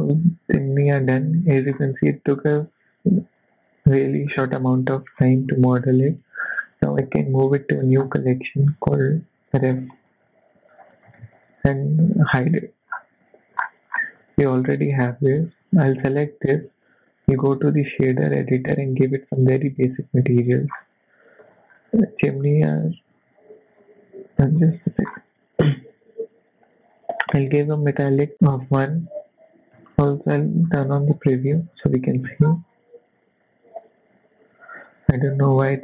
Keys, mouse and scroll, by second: 0.0 scroll down 5, 1.7-2.3 scroll up 1, 2.3-2.6 scroll up 1, 3.4 click, 4.3-4.8 scroll down 6, 4.8 middle click, 5.2-6.4 scroll up 6, 5.5 shift+middle click, 6.2 middle click, 7.2 m, 12.4 click, 12.9-13.6 scroll down 4, 13.6-14.0 scroll up 7, 14.5 click, 16.2 click, 17.2 click, 19.0 click, 19.8 click, 23.9-24.4 scroll up 5, 23.9 n, 24.4 scroll up 3, 24.6 middle click, 25.1-25.8 scroll up 1, 25.8 click, 28.3 middle click, 28.3 scroll down 7, 28.5 middle click, 30.5 click.